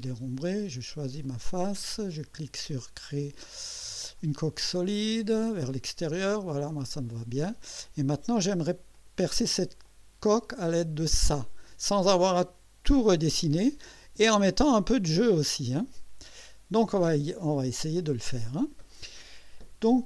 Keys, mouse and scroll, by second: 1.2 click, 4.2 click, 7.1 click, 7.9-8.7 drag, 8.9 click, 9.8 click, 16.9 click.